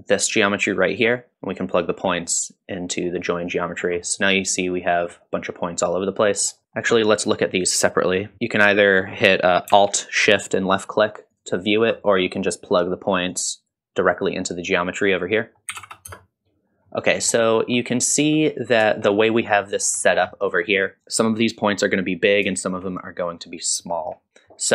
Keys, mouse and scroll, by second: 0.0-1.3 drag, 1.7-3.0 drag, 3.8 scroll up 1, 4.1 middle drag, 4.9 middle click, 5.9 middle click, 6.6 click, 6.6 scroll up 1, 6.8 middle click, 11.3 alt+shift+click, 13.3-13.7 drag, 15.6-16.6 drag, 15.6 middle click, 16.9-17.3 middle drag, 18.2-18.5 scroll up 1, 19.6 middle click, 20.3 middle click, 20.3-20.6 scroll up 2, 21.9 middle click, 22.5-22.8 shift+middle drag, 23.1-23.8 scroll down 2, 23.8 shift+middle click, 24.3 shift+middle click, 24.3 alt+shift+click, 24.3 scroll up 1.